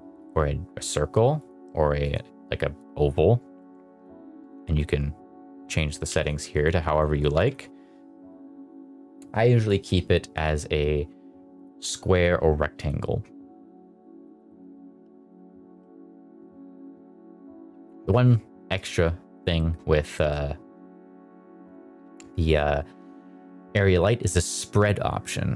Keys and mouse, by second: 1.3-2.0 drag, 2.7 click, 3.9-5.6 drag, 5.9 click, 6.5 click, 7.1 click, 10.4-11.6 drag, 12.1-12.6 drag, 12.7 click, 14.2 middle click, 14.4 shift+middle drag, 14.6 middle drag, 15.0 r, 15.2 click, 15.6 g, 16.0 click, 16.2 middle click, 16.6 middle click, 19.5 shift+middle drag, 20.0 shift+middle click, 23.9-25.5 drag.